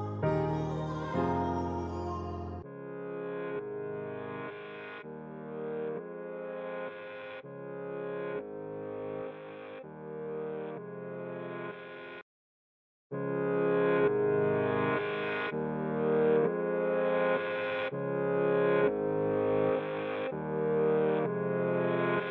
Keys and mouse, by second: 0.4-1.8 middle drag, 1.6 s, 3.6-3.9 drag, 3.9 middle click, 4.0-4.8 drag, 4.8 middle click, 4.9 click, 5.1 middle click, 5.2-6.4 drag, 7.0 click, 15.4 Tab, 16.9 Tab, 17.5 middle click, 18.8 `, 20.3 middle click, 20.8 middle click.